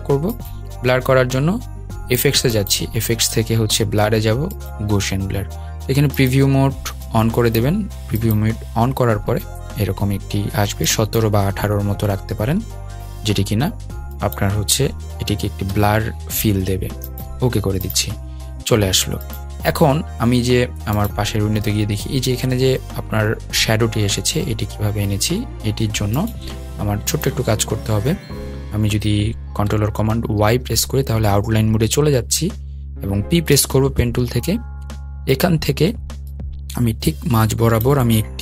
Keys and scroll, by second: 30.4 super+y, 33.2 p.